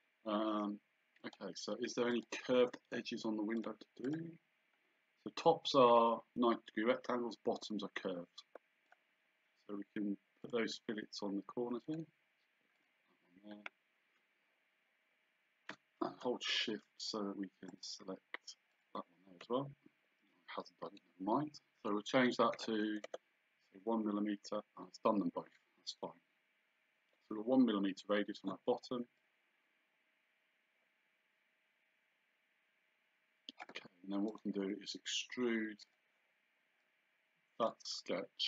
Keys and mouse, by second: 1.2 click, 3.6 click, 8.9 click, 10.5 click, 11.9 click, 17.7 shift+click, 22.6 KP_1, 23.1 KP_Enter, 29.2 click, 34.3 right click, 35.9 click.